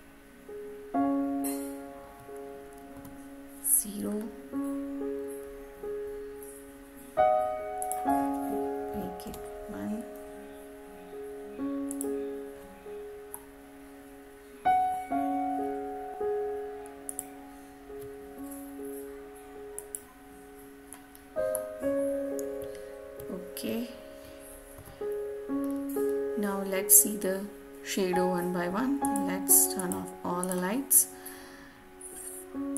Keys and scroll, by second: 9.1 Return.